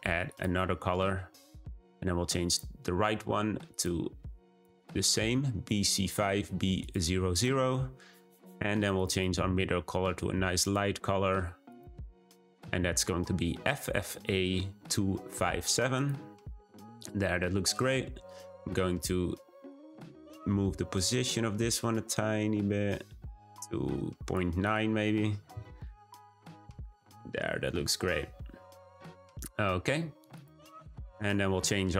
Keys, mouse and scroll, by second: 0.3-3.8 drag, 10.6-11.7 drag, 19.7-22.7 drag, 24.6-31.9 drag.